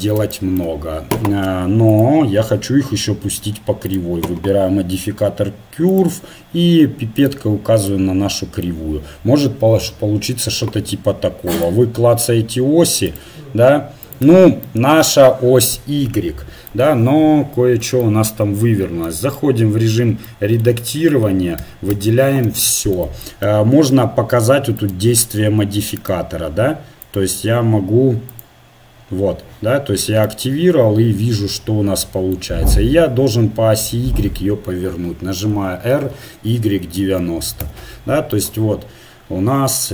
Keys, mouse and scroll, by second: 0.5-1.6 middle drag, 0.5 right click, 1.9-4.1 drag, 5.9-7.9 right drag, 8.0-11.6 middle drag, 11.6-14.6 drag, 14.6 right click, 14.8-15.9 drag, 18.7 Tab, 21.6 a, 21.9 a, 24.8-30.3 drag, 35.5 r.